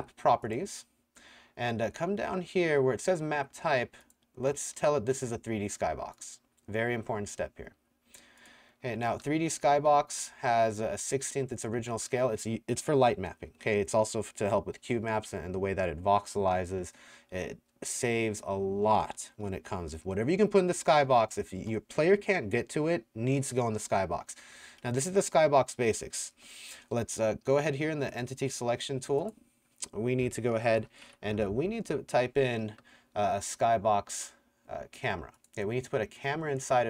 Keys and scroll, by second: 9.2-11.8 typing, 21.1 w, 24.7 w, 26.4 5, 30.5-31.6 typing, 36.4-36.8 typing.